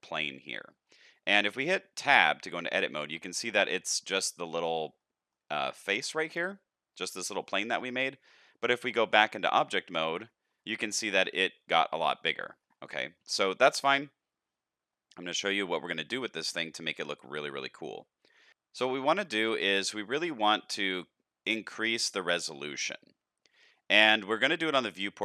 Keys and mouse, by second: 0.2 middle click, 1.4 middle click, 2.0 Tab, 2.6-3.7 middle drag, 4.9 middle click, 9.1 Tab, 10.7 shift+middle click, 11.1-12.2 middle drag, 13.0 shift+middle click, 13.4 middle drag.